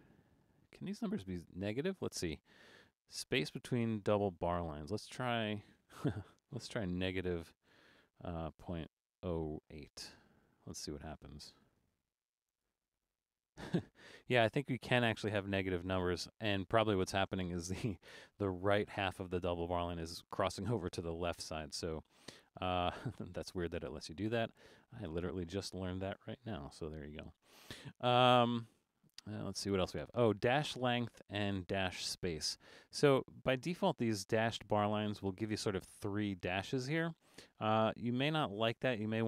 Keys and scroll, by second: 7.6 -, 11.7 8, 24.9 super+z, 26.7 alt+super+a.